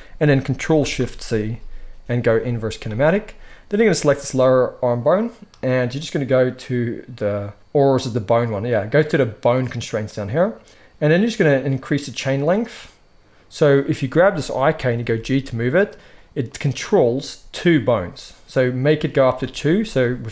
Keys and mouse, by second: 0.7 ctrl+shift+c, 3.8-9.7 drag, 12.1-14.5 drag, 14.9 g, 16.4-19.8 drag.